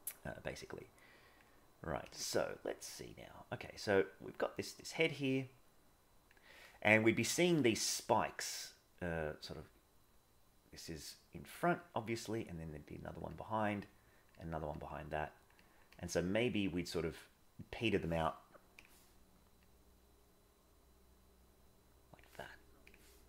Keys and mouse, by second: 0.3 click, 0.8 click, 1.5 click, 3.8-5.0 drag, 5.1-6.3 drag, 8.5 click, 9.1 click, 9.4-11.6 drag, 12.0-13.2 drag, 13.3 click, 13.7 click, 14.4 click, 14.8 click, 15.6 click, 16.1 click, 17.7 click, 19.6-22.2 drag.